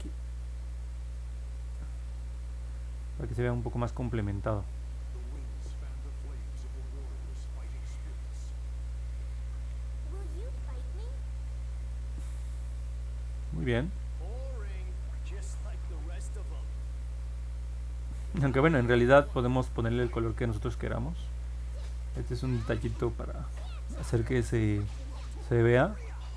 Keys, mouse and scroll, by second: 1.4 click, 2.2 click, 3.0 click, 3.4 click, 3.7 click, 4.0 click, 4.3 click, 5.4 click, 5.7 click, 6.3 click, 6.6 click, 7.1 click, 7.4 click, 10.0 middle click, 10.4 middle click, 10.8 middle click, 11.1 scroll up 2, 11.9-13.2 alt+drag, 13.5-14.1 scroll up 4, 15.0 alt+middle click, 15.8 middle click, 17.2 alt+middle click, 18.3-18.9 scroll up 2, 19.0 scroll down 1, 19.3 scroll up 1, 20.5 alt+middle click.